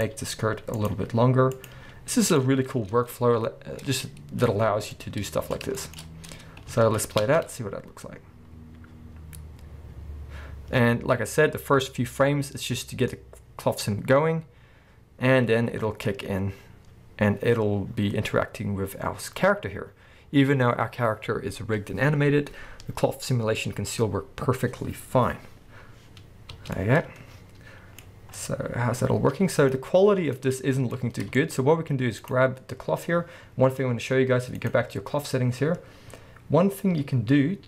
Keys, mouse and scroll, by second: 0.9 click, 1.7 click, 2.4 click, 2.8 scroll down 1, 2.9 Tab, 3.8 scroll down 1, 3.9-29.4 middle drag, 4.5-5.0 scroll up 2, 6.8 alt+a, 7.2 space, 28.0-28.4 scroll up 2, 30.1 scroll down 1, 30.3 middle drag, 30.9-31.3 scroll up 1, 31.3 shift+middle click, 32.2 click, 34.6 click, 36.6-37.6 scroll down 1.